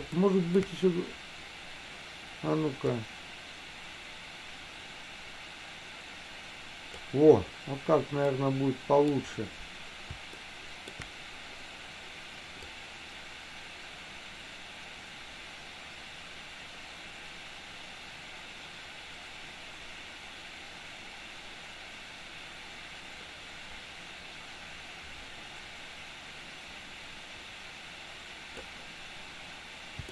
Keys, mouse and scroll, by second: 0.3 scroll up 1, 0.4 shift+middle click, 3.2-7.3 drag, 8.4 middle click, 10.5 shift+middle click, 13.0-29.0 drag.